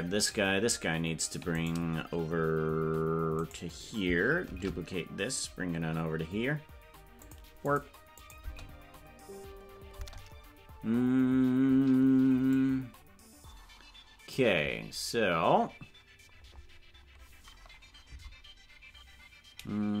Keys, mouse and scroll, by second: 4.5 shift+d, 7.7 click, 8.2-9.6 drag, 8.4 space, 10.1 space, 12.6-14.4 drag, 14.7 scroll down 1, 18.2 Left.